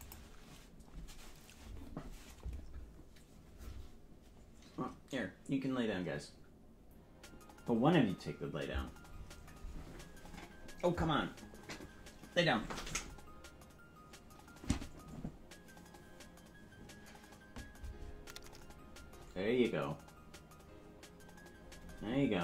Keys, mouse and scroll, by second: 0.0 click.